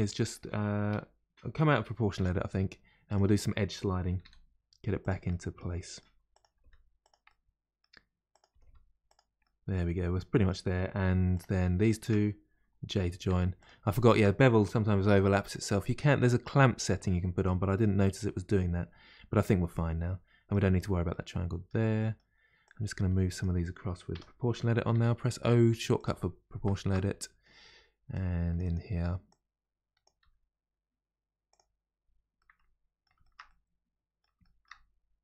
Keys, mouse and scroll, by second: 2.1 o, 3.1 click, 4.1 g, 5.3-6.3 middle drag, 6.3 click, 6.5 g, 7.3-8.3 middle drag, 8.3 click, 8.5 g, 9.4-11.3 middle drag, 11.3 click, 11.8 shift+click, 12.9 j, 13.6 click, 14.0 shift+click, 15.0 j, 15.7-17.1 middle drag, 17.1-18.0 scroll down 1, 18.0-22.6 middle drag, 22.6 click, 23.4 click, 24.1 o, 26.7-28.1 shift+middle drag, 28.6-30.2 drag, 30.2 g, 30.3 g, 31.9 scroll down 2, 32.4-34.9 middle drag, 34.9-35.2 scroll down 1.